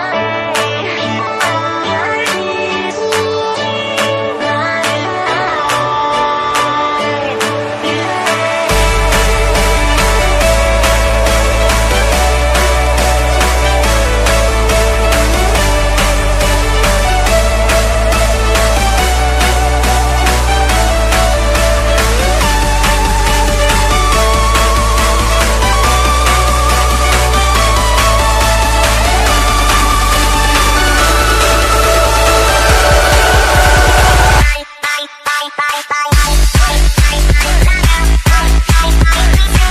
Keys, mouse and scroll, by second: 0.0-1.7 typing, 1.5 click, 4.2 click, 4.8 click, 6.9 Return, 7.1 Down, 8.6-9.1 alt+scroll up 3, 9.3 click, 10.1-11.1 typing, 11.8 click, 12.8 ctrl+t, 12.9 click, 14.0 Return, 14.2 Down, 14.7 click, 15.4 alt+Tab, 16.0 click, 16.4-19.5 typing, 18.0 ctrl+c, 18.2 alt+Tab, 18.9 click, 19.9 click, 20.7 u, 21.1 click, 21.5 Tab, 22.1-23.4 typing, 23.8 Down, 24.1 shift+Left, 24.6 ctrl+c, 24.8 alt+Tab, 25.3 click, 26.1 ctrl+v, 26.4 click, 26.9 r, 27.4 click, 27.9-28.2 alt+scroll down 3, 28.5 alt+scroll up 2, 29.0 click, 29.9-32.4 typing, 32.7 click, 33.4 BackSpace, 34.0 click, 34.7 click, 36.2 ctrl+Num_Lock, 36.2 ctrl+z, 36.6-37.2 scroll up 1, 37.2 click, 38.5-39.7 typing.